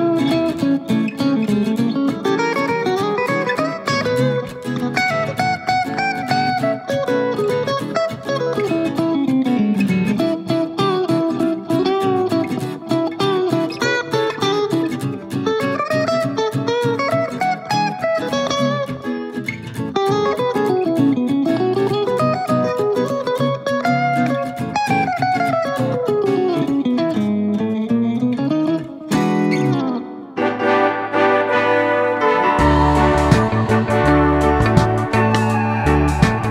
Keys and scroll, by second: 5.7 super+d, 22.0 2, 22.3 Return, 23.4 super+c, 23.5 super+v.